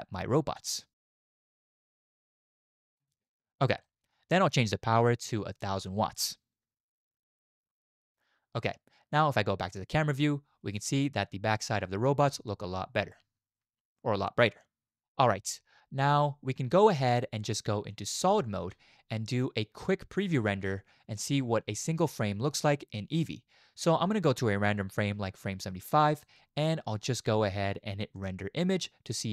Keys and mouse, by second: 0.0 click, 1.1 shift+click, 1.7-3.0 drag, 3.3-3.7 drag, 3.9 shift+drag, 5.6 click, 6.5-7.8 middle drag, 6.9 0, 9.7 middle click, 12.3 space, 18.3 z, 24.5-29.3 drag.